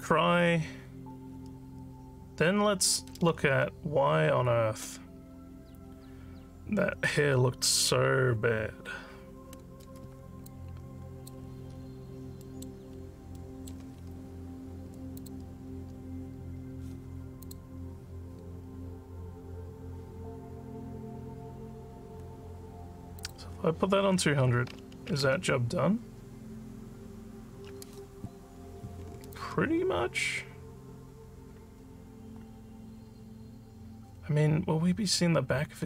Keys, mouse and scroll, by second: 3.7 z, 10.5 alt+click, 11.7 alt+scroll down 5, 12.4 alt+middle click, 13.0 alt+middle click, 13.4 alt+middle click, 15.2 click, 17.4 click, 20.1 scroll down 1, 23.2 click, 29.3-35.8 alt+drag.